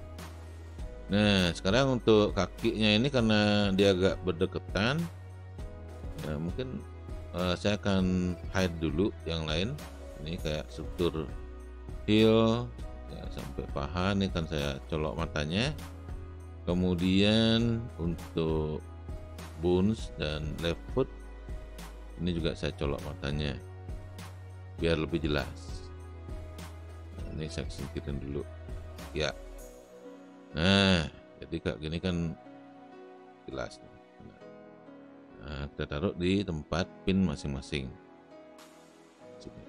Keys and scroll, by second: 1.4 space.